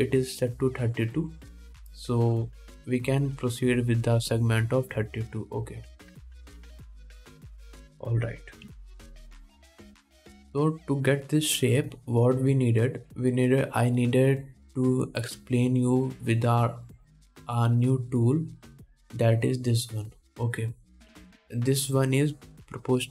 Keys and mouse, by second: 8.3 middle click, 8.4 click, 8.5 middle click, 9.0 click, 9.1-11.8 middle drag, 9.9 KP_1, 11.8-20.1 drag, 20.1-21.6 middle drag, 21.6-22.9 drag, 22.9-23.1 middle drag.